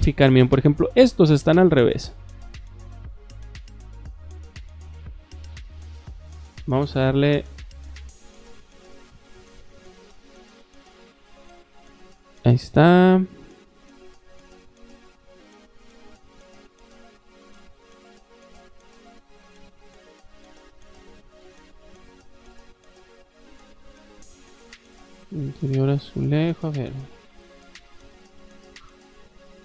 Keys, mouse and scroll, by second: 0.0 middle click, 0.0 scroll up 4, 0.2 middle click, 0.6 shift+middle click, 1.6 middle click, 2.0 shift+middle click, 2.7-3.2 middle drag, 3.4 middle click, 3.9 shift+middle click, 4.6 middle click, 5.3 middle click, 5.8 click, 7.1 click, 7.6 middle click, 8.2 shift+middle click, 9.0 middle click, 10.1 click, 11.0 click, 11.5 space, 12.0 click, 14.4 click, 15.3 click, 16.4 click, 16.9 click, 19.3-21.3 shift+middle drag, 22.0 middle click, 22.4 scroll down 1, 22.4 middle click, 22.9 middle click, 23.6 click, 26.0 middle click, 27.6 click, 28.5 click.